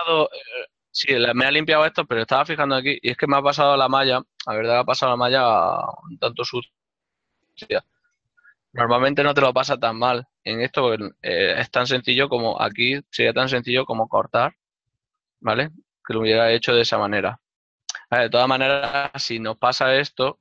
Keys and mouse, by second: 1.5 right click, 3.2 ctrl+z, 11.9 f, 15.1 click, 15.1 d, 15.9 click, 20.3 ctrl+Tab.